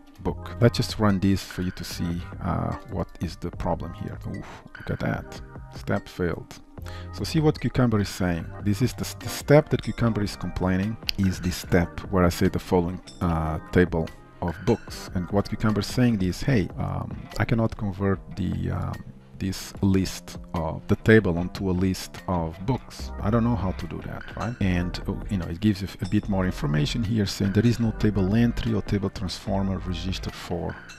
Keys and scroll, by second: 1.7 alt+1.